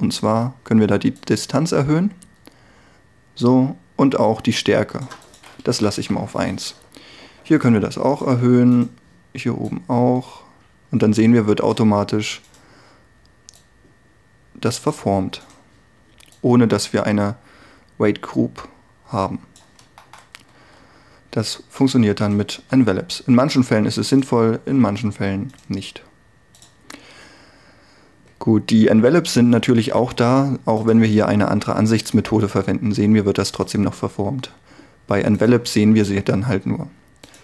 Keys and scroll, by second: 5.8 1, 6.0 Return, 20.5 r, 31.9 r.